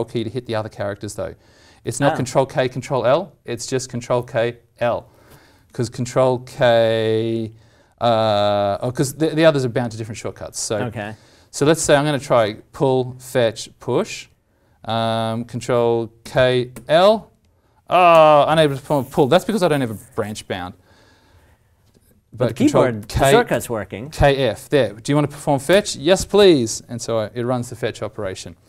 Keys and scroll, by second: 16.2 ctrl+k, 23.0 ctrl+k.